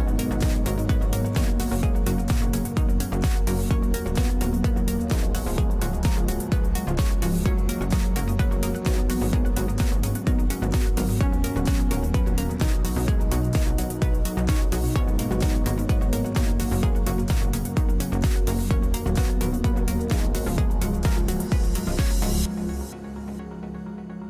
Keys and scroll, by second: 3.7 space, 4.4 space, 7.7 w, 11.0 space, 12.2 space, 13.2 space, 13.8 space.